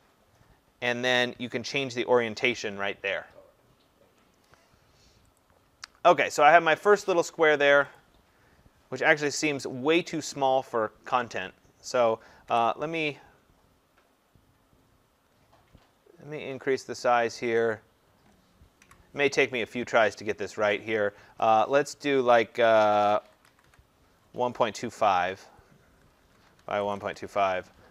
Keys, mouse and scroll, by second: 5.4 click, 8.0 click, 10.3 click, 12.5 Delete, 17.8 click, 18.8 Delete, 20.4 click, 21.5 click, 23.2-23.7 typing, 26.3 Tab, 26.6-27.0 typing, 27.2 Tab.